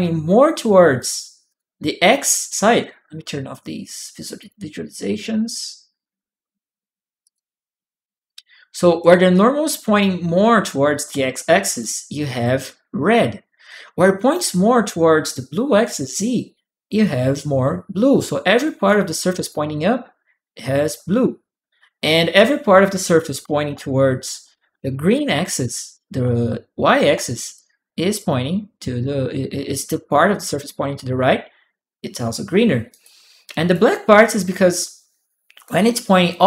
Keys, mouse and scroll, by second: 0.8 click, 1.3 click, 4.2 click, 7.0 click, 8.1 click, 9.2 click, 9.5 right click, 10.7 click, 10.9 a, 11.6 click, 11.6-12.6 right drag, 13.4 right click, 13.5 click, 18.8 click, 22.8 click, 23.5-26.9 typing, 27.3 click, 27.3 right click, 32.7 right click, 32.8 click, 34.5 click.